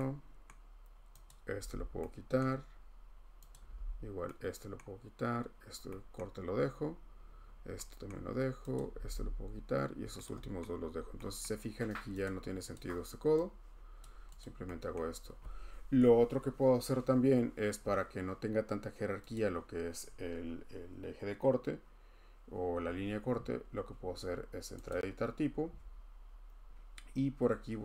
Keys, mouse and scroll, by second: 0.5 scroll, 1.4 typing, 1.5 click, 2.4 scroll, 3.5 click, 3.6 typing, 4.0 scroll, 4.8-5.7 scroll, 5.7 scroll, 8.7 click, 8.9 h, 9.0 h, 9.9 scroll, 10.6-11.0 scroll, 11.4 scroll, 12.2 click, 12.7 click, 14.0 click, 14.4 click, 14.7 scroll, 17.8 scroll, 19.3 click, 23.8 click, 25.3 click.